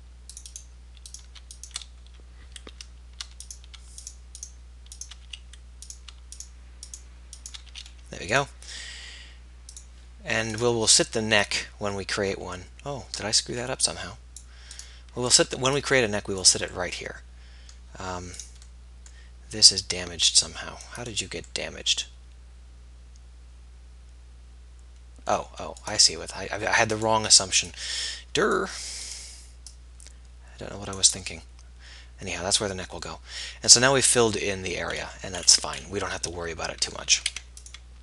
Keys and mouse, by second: 5.3 f, 7.8 f, 14.8-15.8 right drag, 17.5-22.1 middle drag, 22.1 click, 22.9 middle click, 26.0-27.7 right drag, 27.7-29.9 middle drag, 31.0 middle click, 32.0 middle click, 33.3 middle click, 37.3 ctrl+s.